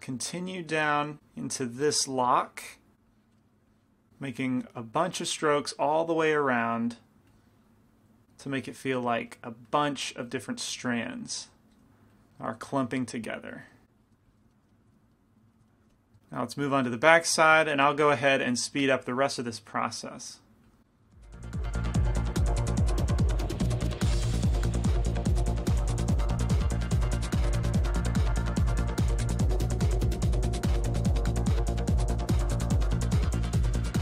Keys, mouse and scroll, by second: 0.9 right click, 1.1-3.4 middle drag, 1.4-8.2 drag, 3.5 middle click, 5.0-8.2 middle drag, 8.7 click, 9.4 middle click, 11.7 click, 11.7-14.1 middle drag, 12.3-14.1 drag, 14.1-15.2 drag, 14.6 middle click, 16.0 f, 17.5 f, 18.4 f, 19.3-22.2 drag, 21.2 middle click, 22.0 middle click, 22.3 click, 22.3 middle click, 22.8 middle click, 23.1-24.2 middle drag, 23.1-25.1 drag, 25.1 middle click, 25.4 click, 26.3-27.6 middle drag, 27.3-29.4 drag, 28.2-31.3 middle drag, 30.7-32.5 drag, 31.6 middle click, 32.5 middle click, 32.9-34.0 drag, 33.4-34.0 middle drag.